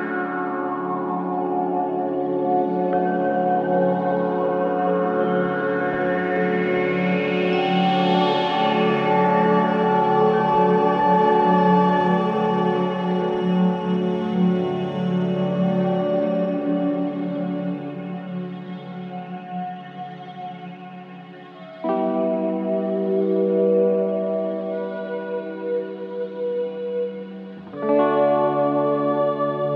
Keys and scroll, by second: 1.4 ], 2.6 shift+i, 3.4 4, 8.2 F9, 9.8 2, 10.9 ctrl+d, 11.0 Escape, 11.9 Escape, 20.7 Escape, 22.9 Escape, 23.3 ctrl+z, 27.1 4, 27.6 2.